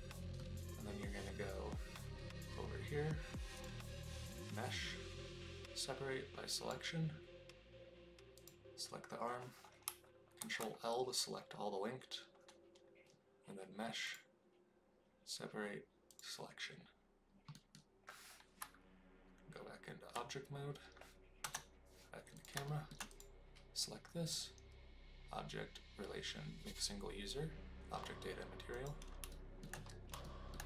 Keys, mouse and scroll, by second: 3.7-7.3 drag, 10.5 ctrl+l, 14.0-16.9 drag, 17.5 middle click, 18.5 Tab, 21.4 KP_0, 22.3 click, 22.6 shift+middle click, 23.0 click, 24.3-28.8 drag, 29.2 shift+middle drag, 30.2 shift+middle click.